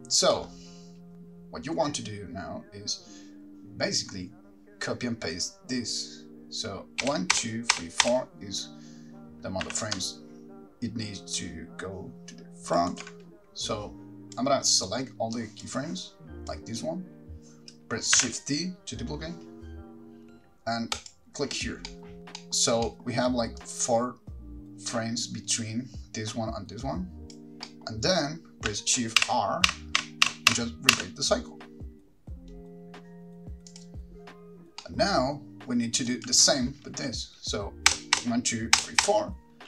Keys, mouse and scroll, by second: 0.1-2.5 scroll down 2, 7.2 Right, 7.5 Right, 8.0 Right, 8.2 Right, 9.8 g, 13.2 ctrl+right click, 13.8 click, 15.0 click, 16.2 click, 18.4 shift+d, 23.8 middle click, 23.8 click, 23.8 scroll up 9, 29.4 middle click, 29.4 shift+r, 29.9-30.7 shift+r, 31.1 shift+r, 34.0 click, 34.0-34.5 scroll down 5, 36.3 click, 36.3 middle click, 36.3-38.1 scroll up 4, 38.1 Right, 38.4 Right, 39.0 Right, 39.2 Right.